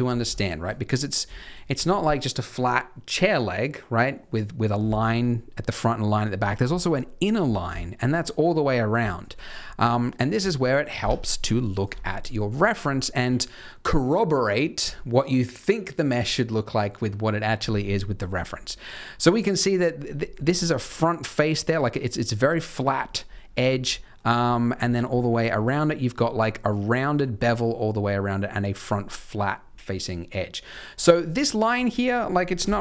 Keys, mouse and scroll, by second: 0.0 scroll down 3, 0.3 shift+middle click, 1.3 shift+middle click, 1.6 scroll down 1, 4.7 scroll up 1, 6.3 scroll down 1, 6.4-7.4 scroll up 3, 7.4 scroll down 5, 7.7 shift+middle click, 9.0 shift+middle click, 30.8 click, 31.3 scroll up 2, 31.7 middle click, 32.6 KP_3.